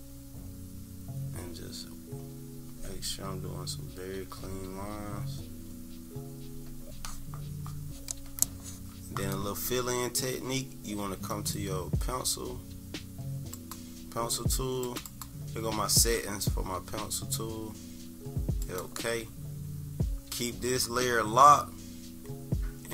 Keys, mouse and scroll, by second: 11.3 click, 14.8 click, 15.1 click, 18.6 click.